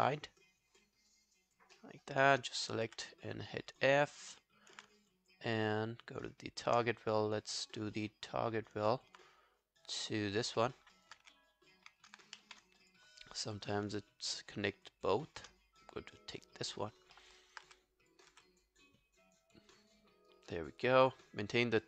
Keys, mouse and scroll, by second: 0.2 alt+scroll up 3, 1.1 alt+scroll up 9, 1.1 alt+click, 1.8 alt+middle click, 3.3 scroll down 1, 3.3 f, 3.6 alt+click, 4.0 alt+scroll down 1, 4.2 alt+click, 5.0 shift+right click, 8.9 alt+middle click, 10.6 alt+middle click, 11.0 alt+click, 11.2 w, 12.0 alt+click, 12.4 ctrl+z, 14.3 shift+right click, 17.2 alt+middle click, 17.4 alt+right click, 17.7 w, 18.3 w.